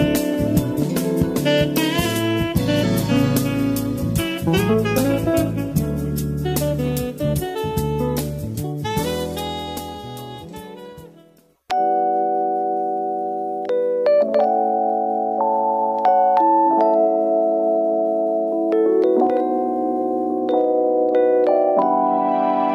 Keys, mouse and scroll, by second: 0.1 middle click, 0.8 space, 1.5-2.7 drag, 2.7 space, 3.7 click, 4.1-7.2 middle drag, 9.1-10.2 middle drag, 10.2 space, 12.1 middle click, 12.9 click, 14.4 shift+d, 16.0 click, 17.7 x, 19.7 middle click, 20.5 g, 21.3 middle click, 22.0 g.